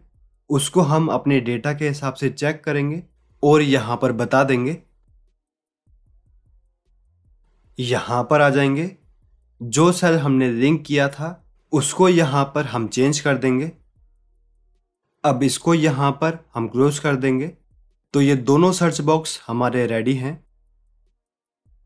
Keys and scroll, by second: 0.4 alt+Tab, 4.5 alt+Tab.